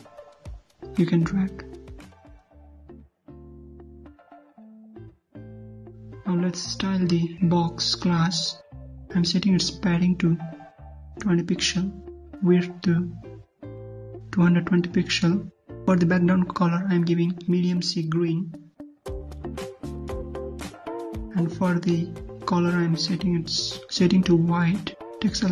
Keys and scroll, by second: 4.3 alt+Tab, 6.3 ctrl+c, 7.2 ctrl+v, 21.5 alt+Tab.